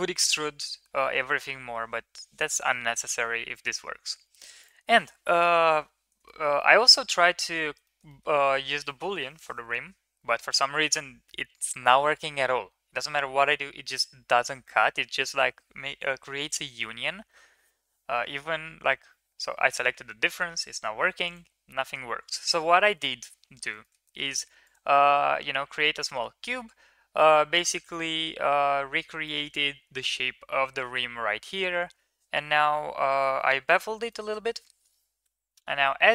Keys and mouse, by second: 4.5 middle click, 6.2 shift+middle drag, 6.6 middle click, 7.8 shift+middle drag, 8.1 middle click, 21.2 click, 23.8 shift+middle click, 24.0 middle click, 24.6 click, 26.0 middle drag, 27.3-27.9 middle drag, 29.2 middle click, 34.0 shift+middle drag, 35.2 h, 35.8 middle drag.